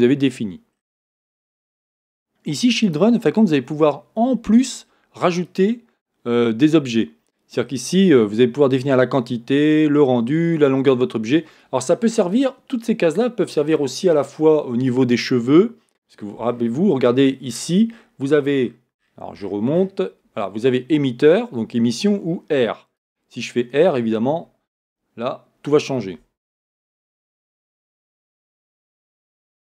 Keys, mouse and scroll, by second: 0.8-1.5 scroll down 1, 3.4-5.6 scroll down 1, 7.3-11.8 scroll down 1, 16.6 scroll up 1, 17.0 scroll down 1, 17.1-17.5 scroll up 1.